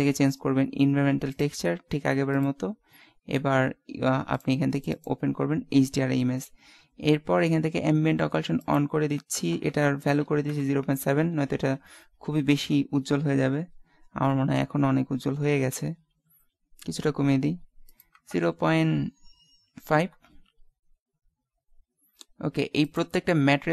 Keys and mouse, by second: 2.3 click, 4.9 click, 8.7-10.4 drag, 11.6 shift+z, 17.9-19.7 drag, 22.9 right click.